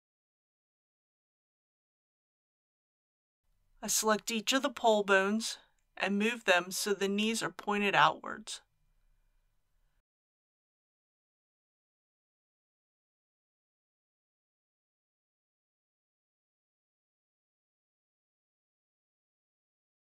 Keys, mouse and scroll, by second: 1.0 middle click, 2.1 KP_1, 3.3 scroll up 1, 3.9 shift+middle click, 5.4 click, 8.6 g, 15.9 click.